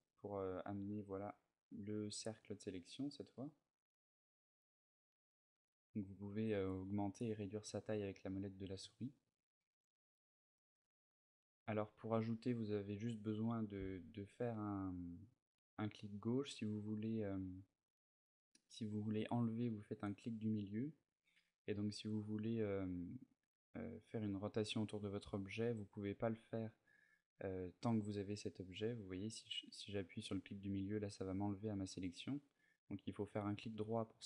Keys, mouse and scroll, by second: 12.6 right click, 13.5 c, 33.3 right click.